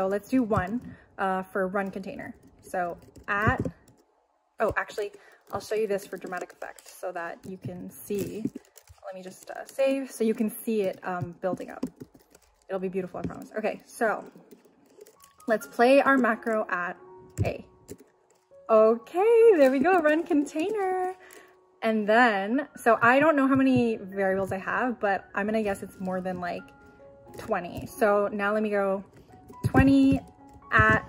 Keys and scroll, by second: 1.6 shift+2, 16.1 shift+2, 17.4 a, 23.3-24.1 typing, 29.4-30.7 typing.